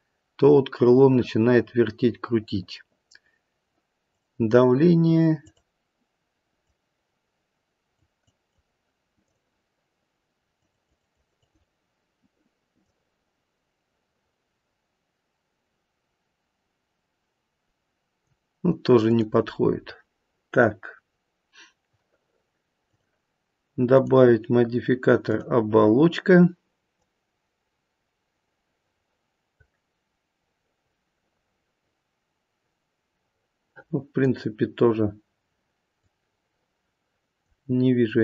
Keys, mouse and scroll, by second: 4.1 click, 5.4 click, 6.5 click, 10.5 click, 10.7 click, 11.1 click, 11.4 click, 12.8 click, 19.0 click, 23.9 click, 36.0 click.